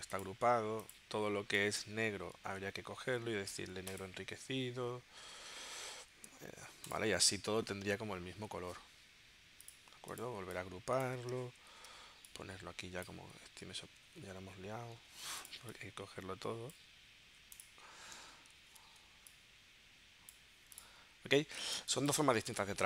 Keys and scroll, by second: 2.5 super+z, 11.7 super+g, 14.1 super+z, 15.0 super+z, 18.6 super+g, 21.8 space.